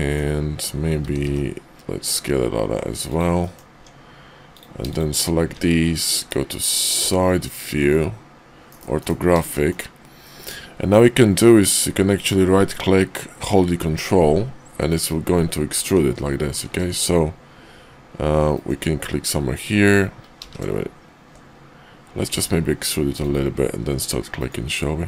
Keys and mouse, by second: 1.0 s, 3.4 click, 3.8 Tab, 4.4 click, 5.4 `, 6.1 KP_5, 7.0 `, 8.6 KP_5, 9.0 KP_5, 9.5 shift+middle click, 14.8 ctrl+click, 16.6 ctrl+z, 18.4 ctrl+click, 20.4 ctrl+z, 22.3 e.